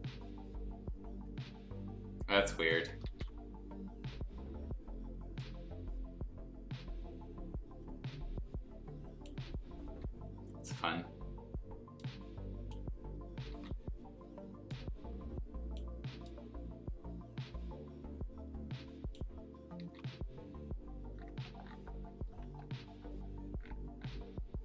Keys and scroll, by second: 3.0 ctrl+z, 9.8 ctrl+z, 13.5 ctrl+z, 19.8 ctrl+z.